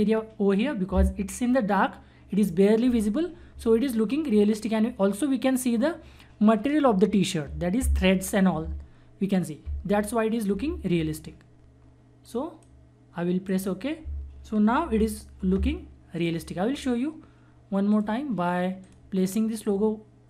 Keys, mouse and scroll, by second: 12.2 click, 12.3 click, 14.9 ctrl+-, 16.2-20.2 drag.